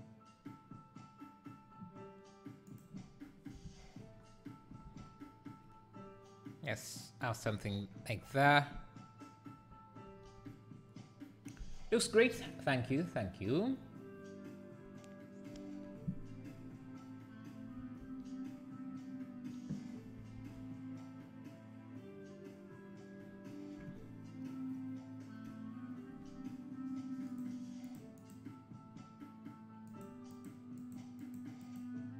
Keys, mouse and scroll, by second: 3.2 scroll down 3, 3.7 alt+a, 4.1-5.2 scroll down 1, 23.5-27.3 scroll down 1, 27.3 click, 27.9 click, 28.2 click, 29.9 click, 30.3 click, 30.8 click, 31.2 click, 31.6 click.